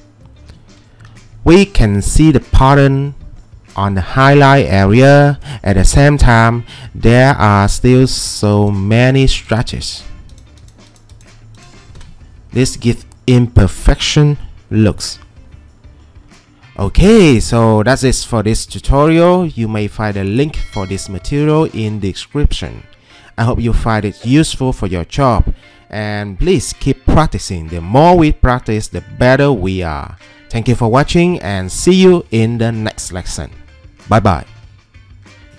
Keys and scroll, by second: 1.1 ctrl+2, 12.0 Escape.